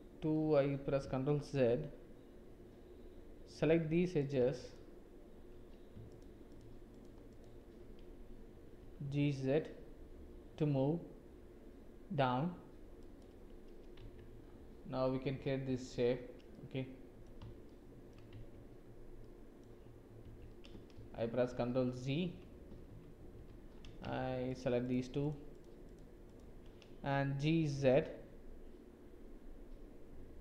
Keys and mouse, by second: 0.2 ctrl+z, 4.2 click, 6.1 shift+click, 7.3 shift+click, 8.7 g, 14.0 Tab, 15.6 Tab, 16.5 click, 17.6 shift+click, 18.3 Tab, 19.2 click, 20.2 Tab, 21.0 ctrl+z, 21.5 ctrl+z, 21.9 ctrl+z, 22.9 ctrl+z, 23.3 ctrl+z, 24.4 shift+click, 25.2 shift+click, 25.5 shift+click, 25.8 shift+click, 26.3 shift+click, 27.5 g.